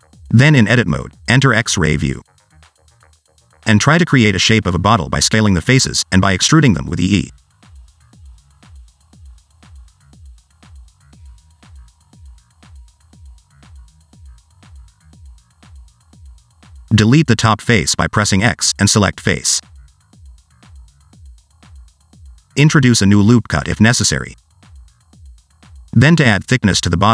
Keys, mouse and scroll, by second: 0.0-0.3 scroll down 2, 0.3 s, 1.8 alt+z, 2.0 scroll up 2, 2.1 shift+middle click, 2.9 click, 3.6 i, 4.3 click, 4.7 click, 5.7 click, 6.1 click, 6.6 s, 7.3 scroll down 2, 7.4 shift+middle click, 7.8 e, 8.5 s, 9.5 shift+middle click, 9.7 e, 11.4 s, 12.5 click, 12.8 click, 13.1 click, 13.4 e, 14.2 e, 16.3 e, 16.9 x, 18.9 click, 19.4 click, 19.8 s, 20.5 click, 20.9 shift+middle click, 22.0 click, 22.5 s, 24.0 ctrl+r, 25.5 alt+z, 25.6 Tab, 26.7 scroll down 2, 26.8 middle click.